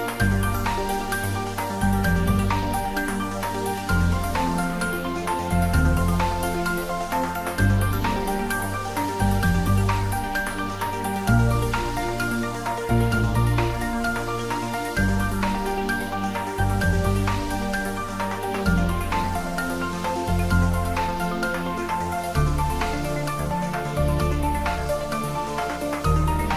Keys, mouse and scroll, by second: 2.9 click, 3.3-3.6 scroll down 1, 4.0 middle click, 5.3-6.3 scroll up 1, 6.0-7.0 typing, 14.8 click, 15.2 scroll down 1, 16.0 middle click, 16.9 scroll up 1, 17.9-18.5 scroll down 1, 20.1 shift+d, 20.9 y, 24.8 click, 26.4 3.